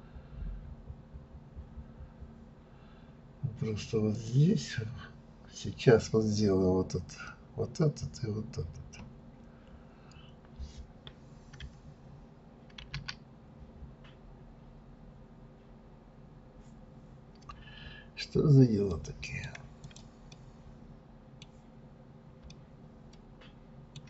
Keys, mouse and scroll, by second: 4.1 click, 20.3-21.8 middle drag, 21.8-22.2 scroll up 2, 22.5-24.0 shift+middle drag.